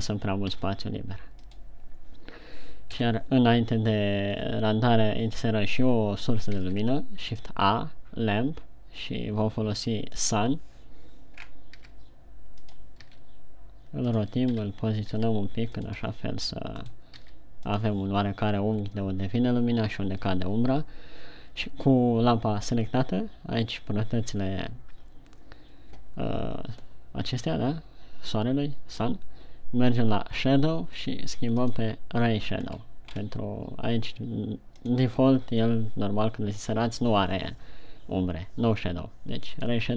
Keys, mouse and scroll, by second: 1.0 g, 2.1 click, 3.5 KP_1, 6.9 shift+a, 11.8-12.4 scroll down 3, 12.4 g, 13.4 click, 13.8 r, 14.7 click, 15.1 KP_3, 15.7 r, 16.3 click, 16.5 g, 17.5 click, 17.7 r, 18.2 click, 32.1 click, 33.1 scroll down 2, 33.5 scroll up 3, 35.4 click.